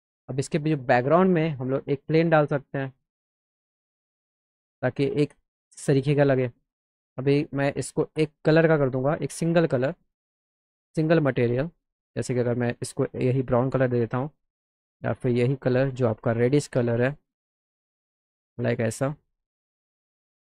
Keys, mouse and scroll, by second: 1.5 click, 2.6 click, 3.3 click, 4.9-6.5 drag, 8.5 click, 10.9 click, 12.8 click, 13.7 click, 15.3 click, 16.4 click, 17.8 click, 18.3 click, 20.0 click.